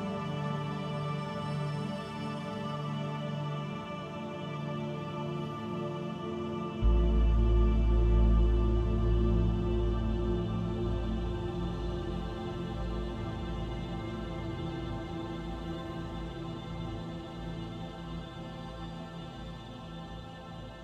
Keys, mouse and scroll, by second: 1.0 scroll down 1, 2.9 click, 2.9-3.9 scroll down 4, 3.9 click, 5.8-6.1 scroll down 4, 7.4 shift+middle click, 8.1 middle click, 10.3 ctrl+s, 15.0 click.